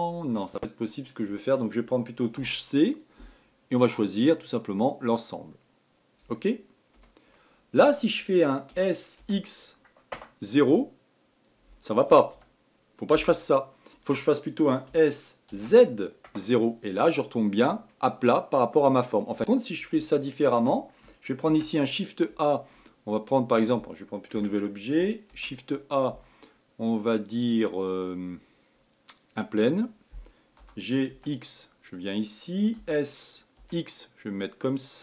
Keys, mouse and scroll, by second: 0.6-2.8 middle drag, 2.8 c, 7.7-9.1 middle drag, 9.1 s, 15.3 s, 18.4-19.6 middle drag, 19.6 scroll down 1, 20.6-22.0 shift+middle drag, 22.0 shift+a, 24.8 Tab, 25.8 shift+a, 31.1 g, 33.3 s.